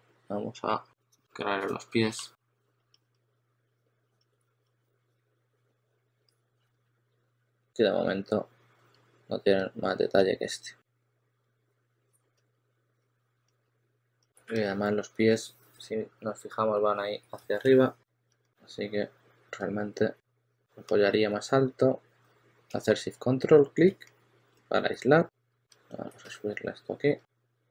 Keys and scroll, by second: 3.8-7.6 typing, 13.5 2, 15.8 shift+super+d, 16.3 shift+super+d, 17.3 shift+super+x, 18.2 s.